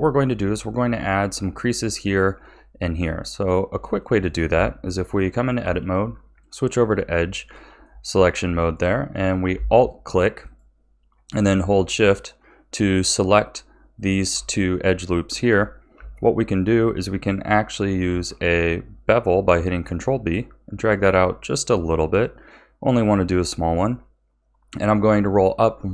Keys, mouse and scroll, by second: 3.0 Tab, 4.0-5.6 shift+middle drag, 5.6 2, 6.1-7.1 scroll up 4, 7.1-10.4 shift+middle drag, 10.4 alt+shift+click, 13.9 alt+shift+click, 15.1-18.0 shift+middle drag, 18.0 ctrl+b.